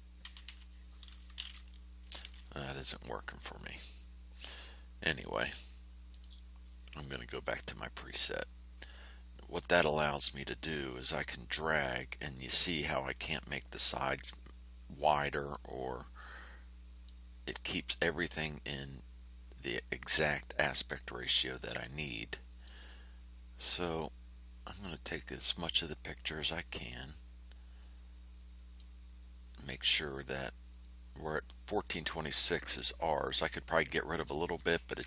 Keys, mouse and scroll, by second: 0.2 KP_2, 0.4 KP_6, 1.3 KP_Enter, 6.1 click, 9.9-15.7 drag, 17.0-20.3 drag, 21.8-22.8 drag, 23.9 click, 26.4-28.9 drag.